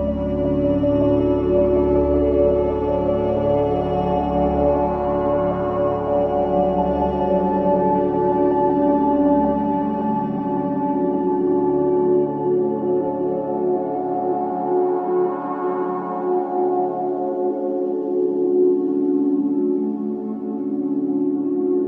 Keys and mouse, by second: 0.0-0.1 typing, 2.0-3.7 typing, 3.7 ctrl+alt+click, 4.3 alt+shift+click, 5.6 click, 6.9 alt+a, 7.2 b, 7.6-11.2 drag, 11.9 Delete, 12.5 click, 14.7 click, 15.9 click, 17.3-18.4 typing, 19.5 click, 20.9-21.8 alt+drag.